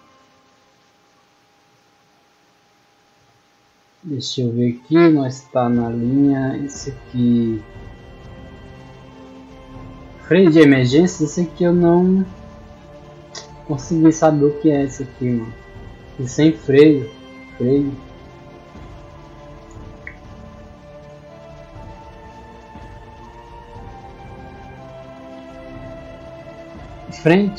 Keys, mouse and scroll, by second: 1.8-3.0 scroll down 4, 3.2-3.9 scroll down 2, 4.2 middle click, 5.9 middle click, 13.5 middle click, 14.5 middle click, 16.2 scroll down 1, 16.8-18.2 middle drag, 19.7-20.9 middle drag, 23.9 middle click.